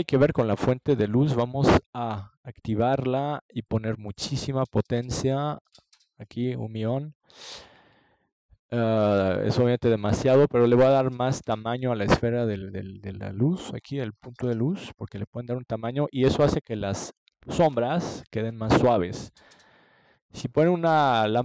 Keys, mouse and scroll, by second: 2.0-3.1 drag, 4.1-5.7 drag, 7.0-8.8 drag, 12.4 ctrl+s.